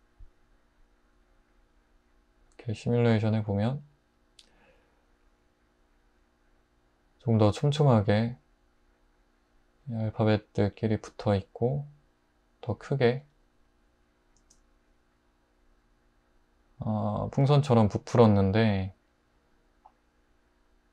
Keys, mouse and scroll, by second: 14.4 space.